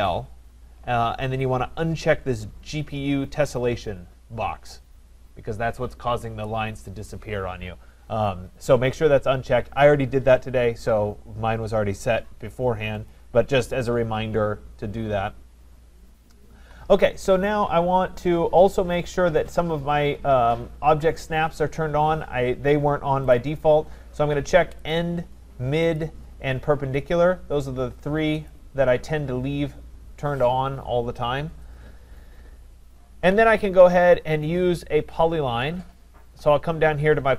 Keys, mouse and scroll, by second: 0.1 click, 13.1 click, 23.4 click, 24.9 click, 26.0 click.